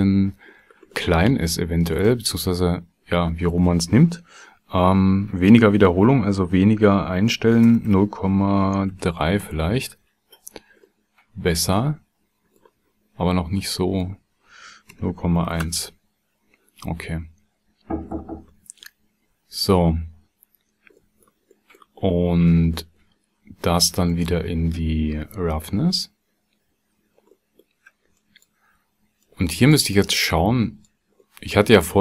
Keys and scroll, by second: 7.7 KP_0, 7.9 KP_Decimal, 8.9 KP_3, 9.4 KP_Enter, 14.9 KP_0, 15.1 KP_Decimal, 15.4 KP_1, 15.6 KP_Enter.